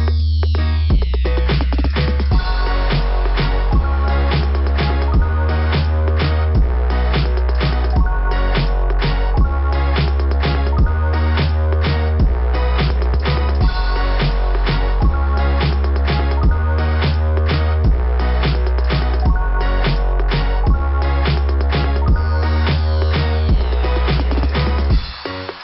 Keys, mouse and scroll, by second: 3.4 click, 6.5 click, 6.6 click, 6.7 click, 6.8 click, 6.9 click, 8.0 click, 8.2-9.3 typing, 15.7 click, 20.3 click, 20.7 click, 21.0 click, 22.7 scroll down 2, 24.6 click, 24.8 click, 24.9 click, 25.5 3.